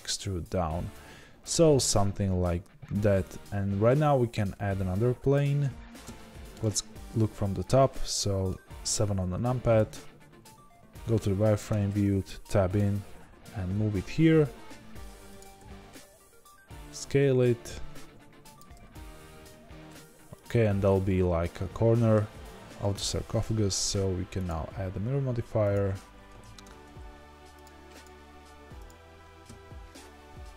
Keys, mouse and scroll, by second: 0.0-15.5 middle drag, 2.9 Tab, 5.3 shift+a, 6.5 KP_7, 10.7 z, 11.7 Tab, 12.7 g, 15.5 s, 20.9-25.7 middle drag, 25.7-30.5 drag, 26.4 ctrl+z.